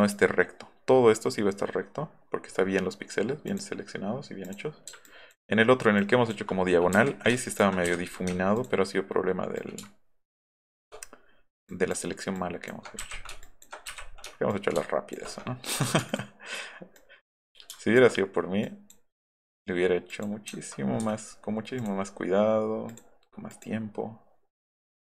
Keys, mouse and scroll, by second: 3.5 click, 4.5 click, 5.1 ctrl+click, 6.0 ctrl+click, 7.0 Delete, 7.9 Delete, 9.6-10.7 ctrl+shift+drag, 11.7 ctrl+click, 12.4 ctrl+click, 13.4 ctrl+click, 14.5 ctrl+shift+click, 16.0 ctrl+z, 16.1 ctrl+click, 17.0 ctrl+click, 18.6 ctrl+click, 19.3 click, 20.1 click, 21.0 Escape, 21.8 click, 22.9 click, 23.5 click, 24.6 click.